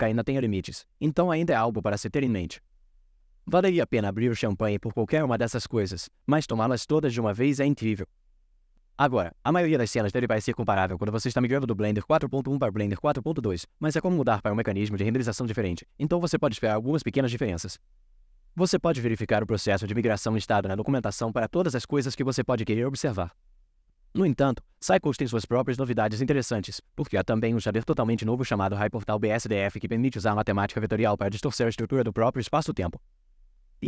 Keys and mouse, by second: 1.7-3.1 middle drag, 27.7 middle click.